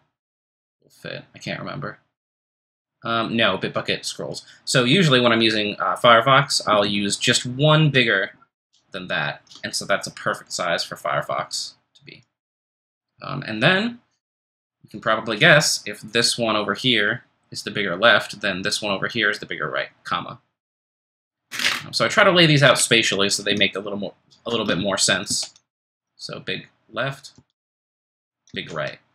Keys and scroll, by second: 8.6 ctrl+shift+super+b, 25.3 ctrl+shift+super+,, 28.1 ctrl+shift+super+b, 28.5 ctrl+shift+super+,.